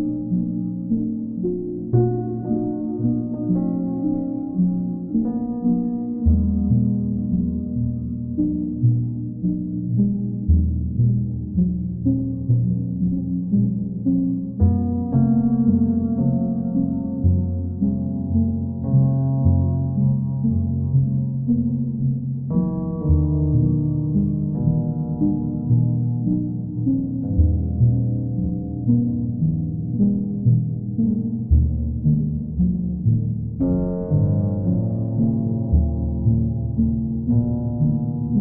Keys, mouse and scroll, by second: 3.9 click, 6.7 click, 6.9 ctrl+z, 8.8 click, 10.6 click, 14.0 click, 15.9 click, 17.5 click, 18.7 click, 21.3 click, 22.3 click, 22.5 ctrl+z, 23.6 click, 25.8-26.9 drag, 29.7-30.7 drag, 31.2 ctrl+z, 32.3 right click, 34.1 click, 37.4 click.